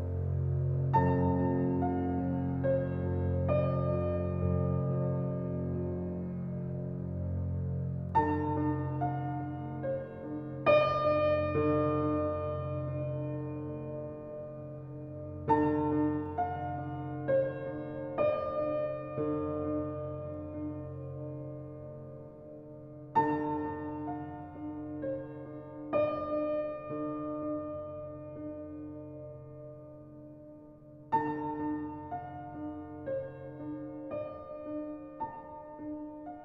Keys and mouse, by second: 1.1 alt+click, 2.4 alt+click, 2.5-4.1 typing, 2.7 alt+middle click, 2.9 alt+click, 3.9 alt+click, 5.5 typing, 6.2-7.8 drag, 8.0 alt+click, 8.9-9.3 typing, 10.0-12.7 drag, 12.8-13.2 typing, 14.3 click, 15.0 typing, 15.5 alt+click, 16.5-17.3 typing, 18.8 alt+a, 18.8 typing, 20.1 click, 21.9-23.0 drag, 23.3 g, 23.6 x, 25.6 shift+click, 26.6 alt+a, 27.5 ctrl+s, 28.1-28.5 ctrl+alt+drag, 30.6 click, 32.1 Tab, 32.7 alt+click, 33.8 1, 34.4 click.